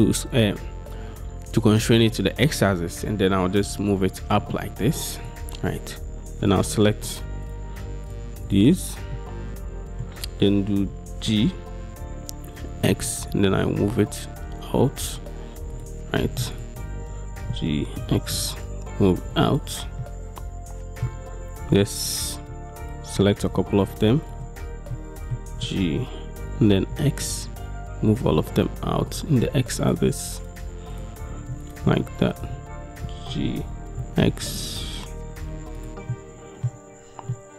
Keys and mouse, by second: 5.3 click, 7.5 shift+click, 8.2 shift+click, 9.2 click, 11.3 g, 12.9 x, 16.6 shift+middle click, 17.5 g, 18.1 x, 20.1-22.6 drag, 22.9 shift+click, 23.6 shift+click, 23.9 shift+click, 25.0 click, 25.6 g, 27.0 x, 29.2 click, 30.1-31.6 shift+middle drag, 31.7 click, 32.1 shift+middle click, 33.4 g, 34.1 x, 35.9 middle click, 36.2 middle click, 37.4 middle click.